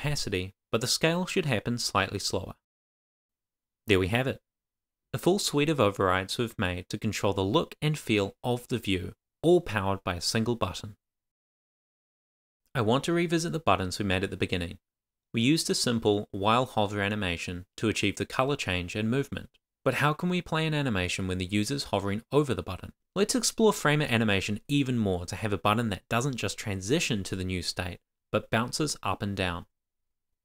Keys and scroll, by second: 0.1 shift+;, 0.5 Return, 0.8 shift+-, 2.1 shift+;, 2.5 shift+[, 2.6 Return, 3.0 shift+;, 3.3 super+s, 27.3 super+s.